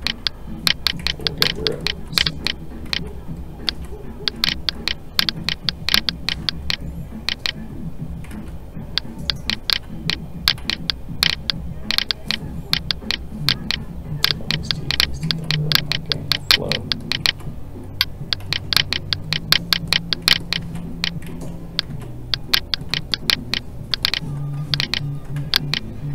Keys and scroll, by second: 2.9 alt+a, 8.3 alt+a, 21.3 alt+a, 25.4 ctrl+z.